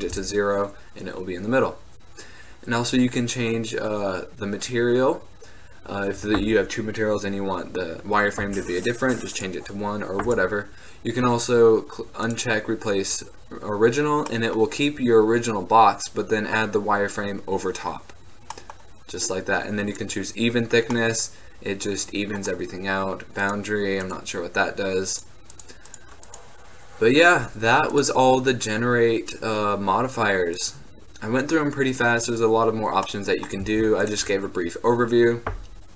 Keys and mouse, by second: 9.5-13.4 drag, 14.4-14.8 middle drag, 18.8-20.9 middle drag, 20.0 click, 21.1-21.8 middle drag, 21.4 click, 21.6 click, 30.7-32.0 middle drag, 32.0-33.2 drag, 33.7 x.